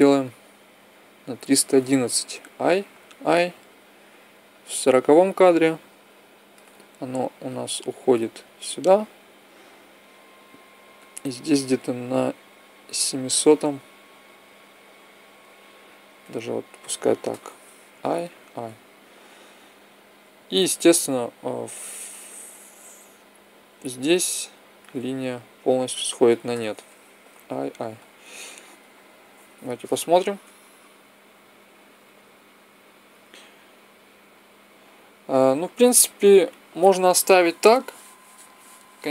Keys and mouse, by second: 2.1 i, 2.6 i, 3.8-5.6 drag, 7.2-9.0 drag, 10.7-12.5 drag, 17.7 i, 18.1 i, 20.0 click, 21.2 click, 21.4 click, 25.5-27.2 drag, 27.0 i, 27.4 i, 28.5-30.3 drag, 30.2 alt+a, 35.9-37.9 drag.